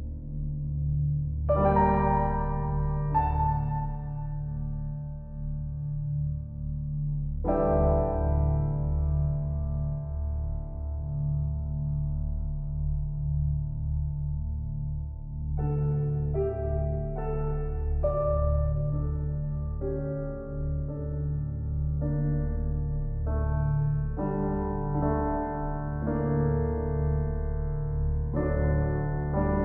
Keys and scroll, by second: 28.0 [.